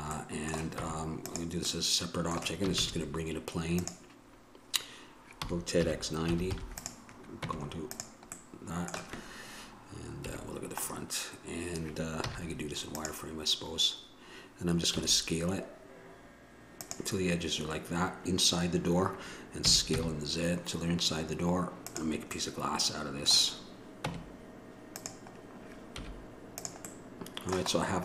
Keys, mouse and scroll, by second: 1.0 Tab, 2.9 shift+a, 5.6 r, 7.6 Tab, 10.5 KP_1, 12.5 z, 19.8 s, 22.5 middle click, 24.3 Tab, 26.1 z.